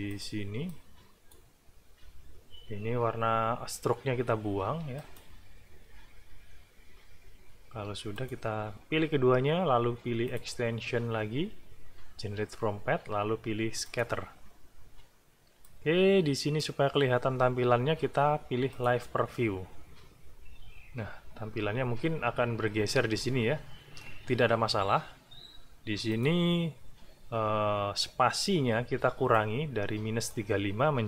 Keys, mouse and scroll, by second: 0.1 click, 0.7 click, 4.9 shift+click, 8.1 shift+click, 10.3 click, 13.8 click, 15.6 click, 18.7 click, 26.1 click, 29.3 click.